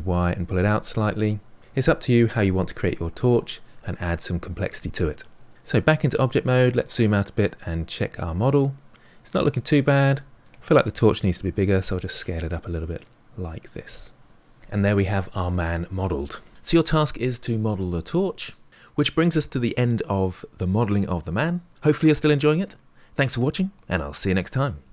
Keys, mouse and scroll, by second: 0.0-2.2 middle drag, 5.6 Tab, 6.1-7.5 scroll down 12, 7.5-10.5 middle drag, 11.4 s, 14.3-15.8 middle drag.